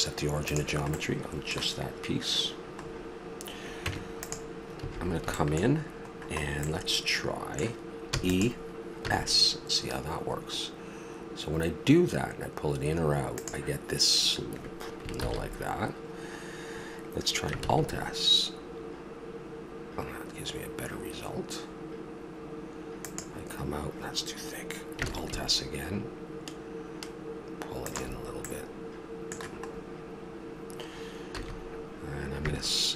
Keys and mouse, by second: 0.9-1.7 middle drag, 3.8 Tab, 4.8 a, 6.7-7.8 middle drag, 8.1 e, 9.0 s, 15.2 ctrl+z, 17.6 alt+s, 25.0 alt+s, 31.3 a.